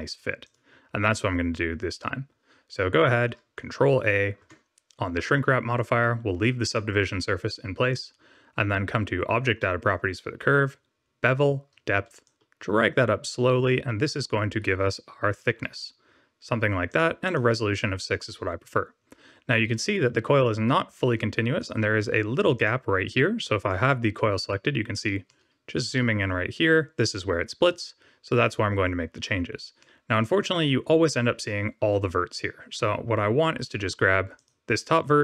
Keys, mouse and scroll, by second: 0.4 click, 1.0 middle click, 4.4 ctrl+a, 6.6 click, 7.8 click, 12.2 shift+click, 16.8 click, 17.8 click, 21.6 click, 22.5 click, 25.2 middle click, 26.2-27.8 scroll up 1, 28.1 Tab, 29.7 middle click, 32.7 1, 34.3 click.